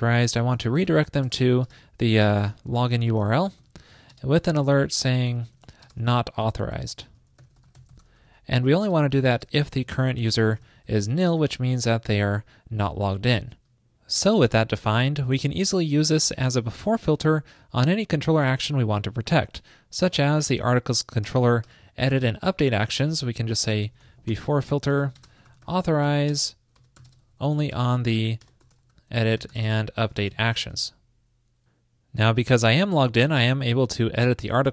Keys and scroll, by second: 21.4 super+Return, 30.8 super+s.